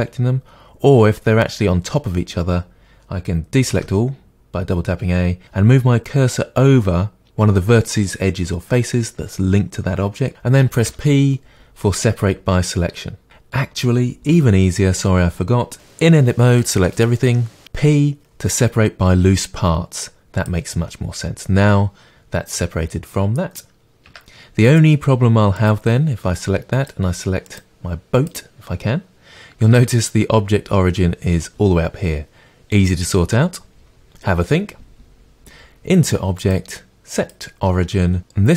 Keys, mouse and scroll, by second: 3.6 a, 10.8 p, 15.9 p, 24.1 Tab, 24.6 click, 25.6 click, 26.7 click, 27.4 click, 28.2 click, 36.4-38.5 drag.